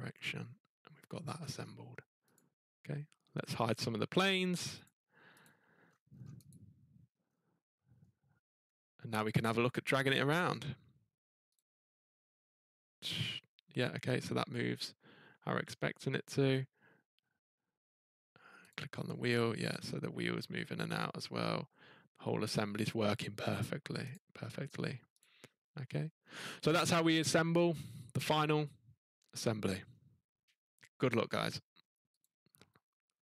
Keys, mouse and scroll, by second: 0.3 middle click, 1.2-1.9 scroll, 2.3 click, 3.8 click, 4.8 click, 5.4 click, 5.8-6.1 scroll, 6.2 scroll down 4, 6.5 click, 7.0 scroll up 3, 7.2-8.5 scroll down 4, 8.5 middle click, 8.6-8.9 scroll up 3, 8.9 scroll, 10.1 click, 11.5 click, 15.7 middle click, 18.7 click, 22.7 middle click, 24.0-24.6 scroll, 24.1 click, 25.2 click, 25.4-25.9 scroll, 25.9 scroll up 4, 26.2 scroll down 3, 29.1 scroll, 29.4 scroll up 1, 29.6 scroll down 3, 31.3 scroll down 4, 32.2 click.